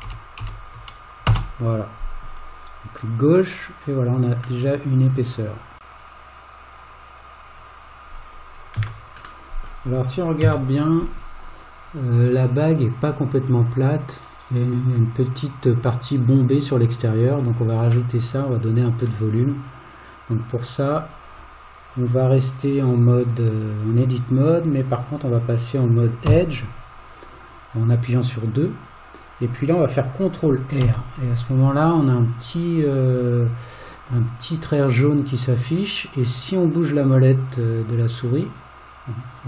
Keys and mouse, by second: 4.7-5.8 middle drag, 9.5 middle click, 10.4 KP_1, 18.1 middle click, 26.3 2, 30.8 ctrl+r.